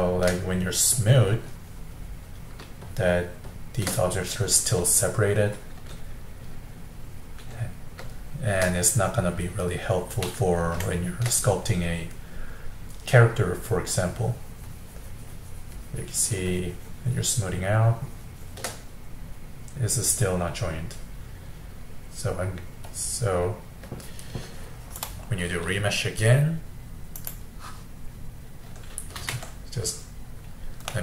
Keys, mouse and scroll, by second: 4.7-7.7 middle drag, 8.2-13.9 shift+middle drag, 13.9-18.9 drag, 18.9-23.8 middle drag, 25.0-28.1 drag, 29.2 ctrl+z, 30.9-31.0 middle drag.